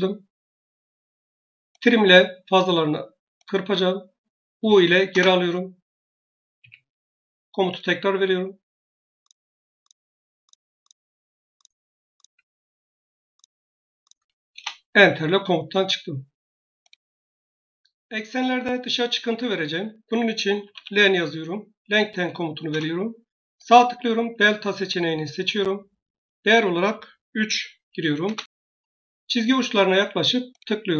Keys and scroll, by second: 4.4 u, 5.0 Return, 6.4 Escape, 14.4 Return, 20.3-21.3 typing, 22.6 Return.